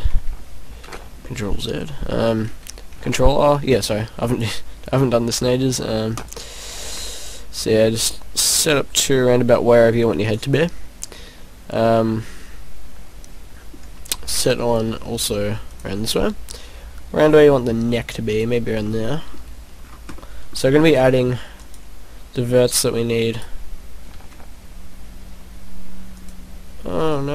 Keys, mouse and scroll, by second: 0.0 scroll down 1, 0.8 ctrl+z, 1.2 middle click, 2.0 middle click, 2.9 ctrl+r, 6.2 click, 6.7 ctrl+r, 10.3 click, 10.5 middle click, 14.1 ctrl+r, 18.4 click, 18.9 middle click, 19.8-20.3 scroll down 3, 20.1 middle click, 20.8 ctrl+r, 23.4 right click, 24.2 ctrl+r.